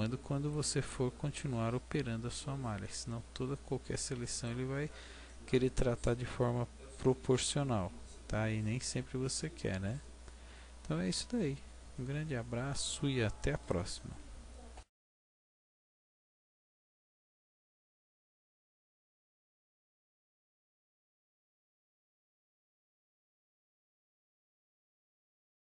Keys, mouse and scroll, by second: 1.4 middle click, 4.1 right click, 5.2 middle click, 6.0 middle click.